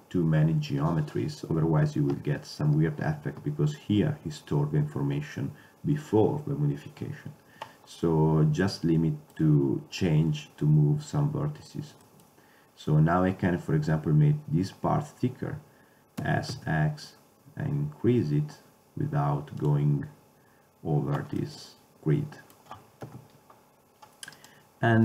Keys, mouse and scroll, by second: 8.1-9.7 middle drag, 16.3 s, 21.5-22.6 middle drag, 23.1 KP_7, 24.5-25.0 drag.